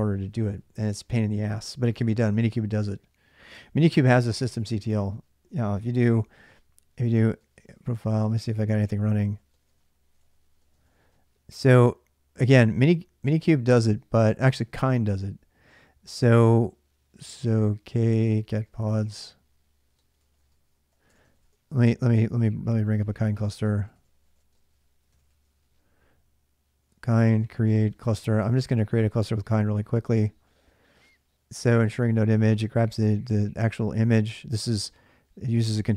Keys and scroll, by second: 3.9 alt+Tab, 5.7-11.3 typing, 17.4-29.2 typing.